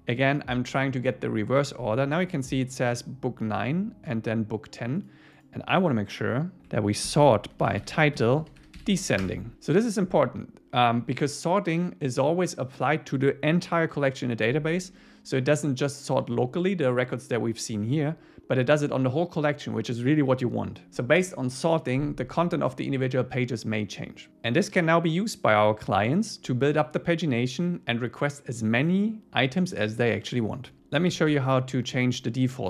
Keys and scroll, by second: 9.2 Return, 31.5 Return.